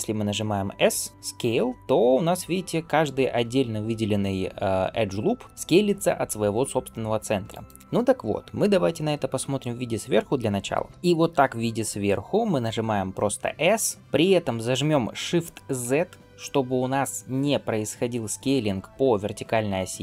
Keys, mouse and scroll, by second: 0.7 s, 10.9 shift+middle click.